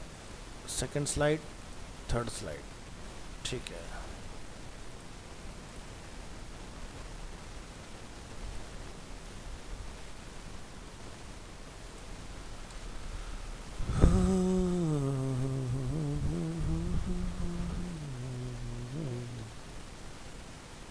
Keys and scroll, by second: 2.6 alt+Tab, 10.5 ctrl+c, 10.9 alt+Tab, 12.3 ctrl+v, 16.2 ctrl+a.